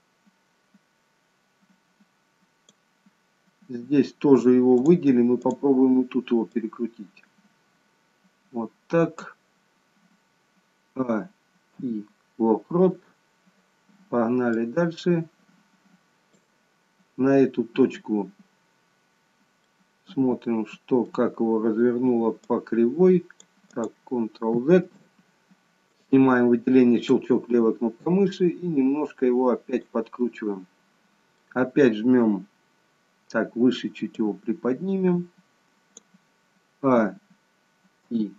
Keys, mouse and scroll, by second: 4.8 click, 5.5 click, 6.8 click, 11.1-11.8 a, 11.8 i, 14.7 click, 19.7 middle click, 22.5 click, 24.4 click, 24.9 ctrl+z, 26.0 click, 27.1 click, 28.1 click, 30.2 middle click, 34.2 click, 37.0-38.1 a, 38.1 i.